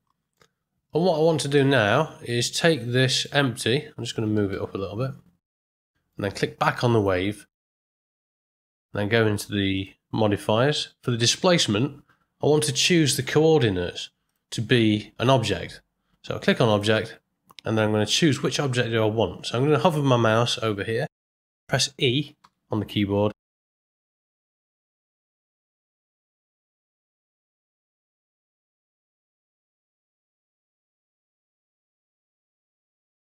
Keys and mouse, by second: 1.6-2.2 middle drag, 3.1 click, 4.3 g, 5.8 middle drag, 6.9 click, 8.1 middle click, 9.7 click, 14.3-16.8 drag, 22.4 e, 31.4-32.5 middle drag, 32.8-33.1 ctrl+middle drag.